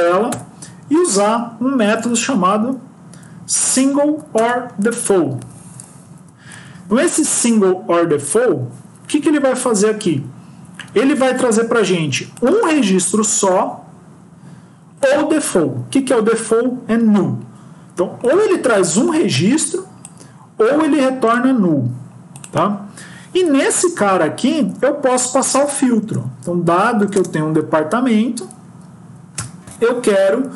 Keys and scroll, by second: 4.0 Down, 4.2 Return, 6.4 Left, 23.3 End, 24.4 Left, 24.5 Left.